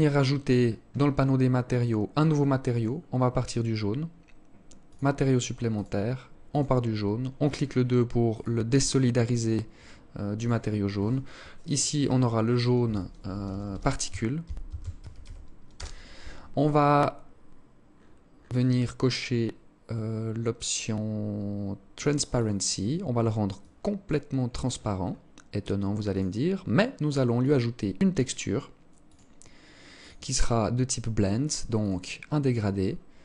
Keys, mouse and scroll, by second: 0.1-0.8 scroll up 10, 1.2 scroll up 8, 1.9 click, 4.0 click, 6.5 click, 17.1-19.1 scroll down 6, 19.1-19.6 scroll down 6, 21.1 click, 21.6 click, 22.8 click, 23.6-24.5 scroll up 10, 25.3 click, 26.5 click, 31.9 scroll down 2, 32.1 scroll up 1, 32.7 click.